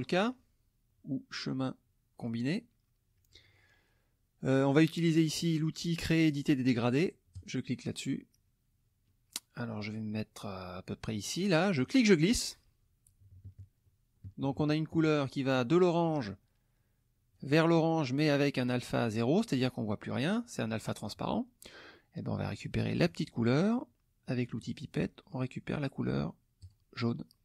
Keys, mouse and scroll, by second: 0.2 click, 2.2 click, 7.4 click, 9.1 middle click, 11.8-15.1 drag, 16.0 click, 17.3 click, 23.0 click, 24.6 click, 26.6 click.